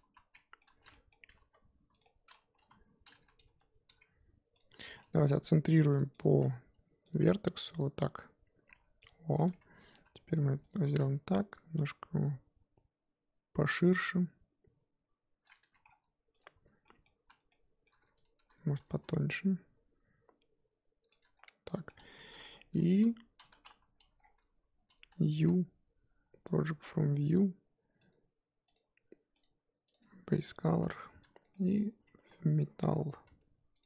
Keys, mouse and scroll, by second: 0.1 z, 0.3 middle click, 0.6 Tab, 0.9 middle click, 1.3 g, 2.0-2.5 middle drag, 2.5 KP_1, 2.8-3.4 scroll up 4, 3.4 g, 5.9 click, 8.6 g, 9.6 Tab, 9.9 a, 10.0 s, 10.9 alt+s, 15.6 Tab, 15.9-16.4 scroll down 2, 16.4 click, 16.6 z, 16.8-17.1 middle drag, 17.1 z, 17.5-18.2 middle drag, 18.2 click, 18.4 Tab, 19.0 alt+s, 21.2 Tab, 21.4 scroll down 2, 21.5-22.8 middle drag, 22.8 KP_1, 23.5 Tab, 23.7 a, 26.5 u, 29.9 click, 30.2-30.8 scroll up 1, 30.8 a, 31.4 click, 32.0 middle click, 32.2 g, 33.7 click.